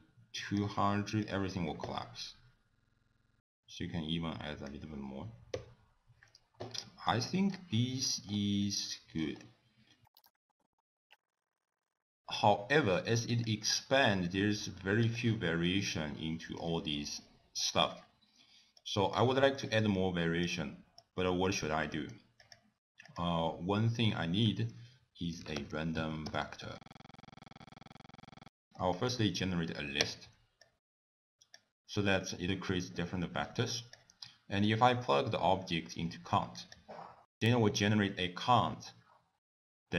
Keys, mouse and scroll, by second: 1.2 click, 3.2 click, 5.5 i, 6.8 middle click, 7.2-8.4 scroll up 14, 8.6 middle click, 9.4-9.8 scroll down 4, 10.1 click, 10.2 click, 10.3 scroll down 1, 11.2 click, 11.4 click, 11.6 middle click, 11.9 middle click, 12.0 click, 13.5 click, 15.1 click, 15.7 middle click, 18.8 click, 19.4 middle click, 19.9 click, 21.0 click, 21.8 middle click, 22.4 click, 23.0 click, 24.5 ctrl+a, 27.0 middle click, 27.1 scroll down 2, 27.3 click, 28.0 middle click, 28.0 scroll up 1, 28.1 scroll down 6, 28.2 click, 28.3 g, 28.5 scroll up 7, 28.8 middle click, 30.0 click, 30.6 click, 33.4 click, 33.7 click, 34.6 click, 37.3 click.